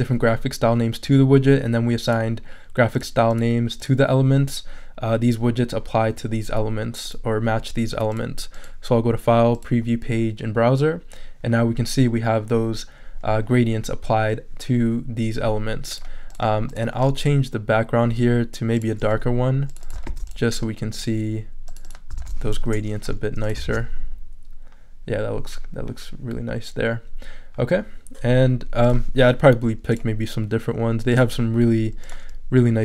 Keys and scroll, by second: 20.1 super+c, 22.2 super+v, 22.6 super+Return, 23.3 Return.